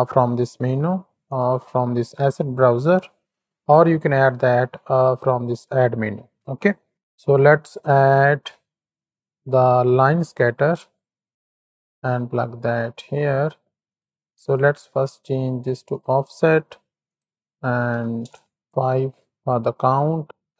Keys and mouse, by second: 4.0 shift+a, 11.6 click, 12.3 click, 13.8 click, 14.4 click, 15.8 click, 17.0-18.2 drag, 20.2-20.5 drag.